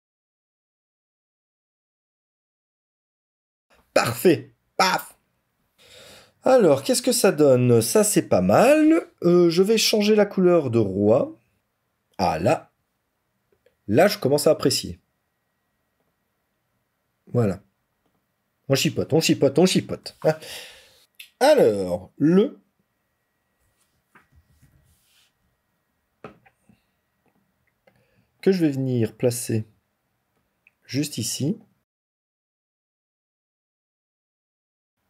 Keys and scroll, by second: 19.6 ctrl+-, 31.8 ctrl+z.